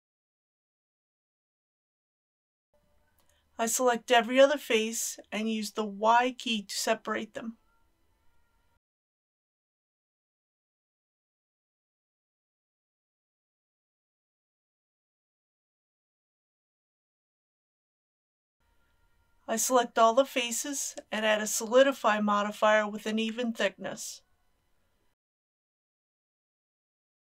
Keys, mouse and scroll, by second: 0.3 KP_7, 0.7 ctrl+r, 1.0 scroll up 1, 1.5 click, 1.8 middle click, 2.7 3, 3.5 click, 4.1 shift+click, 4.9 shift+click, 5.9 shift+click, 6.5 shift+click, 7.0 shift+click, 7.6 middle click, 9.6 middle click, 10.0 shift+click, 10.2 shift+click, 10.5 middle click, 10.7 shift+click, 11.1 middle click, 11.6 shift+click, 12.1 middle click, 13.3 y, 15.6 g, 16.2 click, 17.4 ctrl+z, 21.1 a, 23.1-26.1 drag.